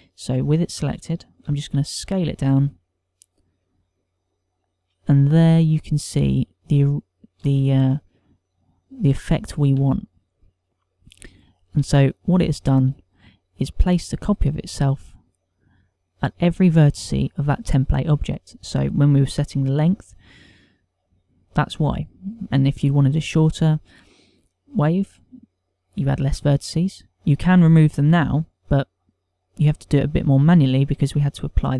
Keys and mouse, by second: 0.0 z, 1.7 z, 2.6 s, 9.0 middle click, 10.2 shift+middle click, 11.2 middle click, 13.1 shift+middle click, 13.4 shift+middle click.